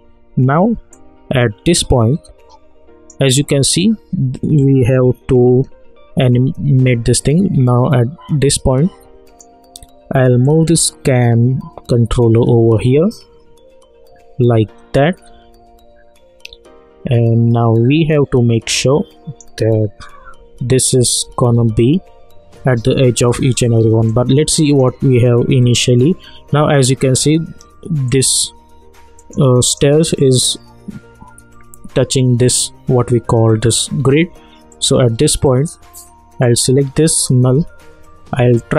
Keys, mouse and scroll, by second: 0.8 click, 7.2-20.2 drag, 20.2 Right, 21.0 Up, 24.0-25.9 drag, 25.9 alt+scroll down 1, 26.0 alt+scroll up 1, 28.1 click, 34.7-36.4 drag, 38.4 Left.